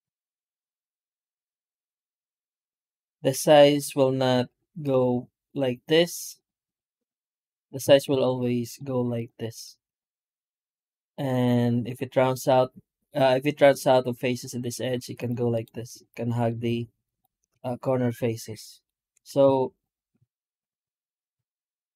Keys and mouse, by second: 1.4 shift+middle drag, 1.8 right click, 2.0 Tab, 2.7 shift+middle click, 3.2 3, 3.7 right click, 4.3 shift+right click, 5.3 shift+right click, 5.9 shift+right click, 6.6 shift+right click, 6.9 shift+right click, 7.2 shift+right click, 7.7 alt+a, 8.1 shift+right click, 8.5 shift+right click, 9.0 shift+right click, 9.4 shift+right click, 9.8 shift+right click, 10.2 shift+right click, 10.5 shift+right click, 11.7 shift+right click, 12.2 shift+right click, 15.0 shift+right click, 15.4 shift+right click, 15.7 shift+right click, 16.2 shift+right click, 16.9 shift+right click, 17.7 middle drag, 18.3 middle drag, 18.6 middle click, 19.0 Tab, 19.3 x, 19.7 right click, 20.1 shift+middle drag, 20.6 middle click, 20.7 Tab, 21.0 Tab, 21.3 shift+q.